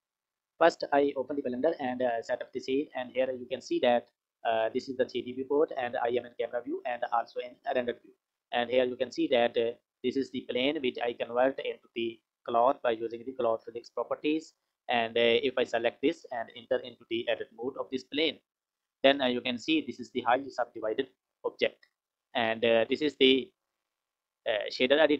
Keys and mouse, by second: 15.4 click, 18.6 Tab, 21.5 Tab, 23.9 click.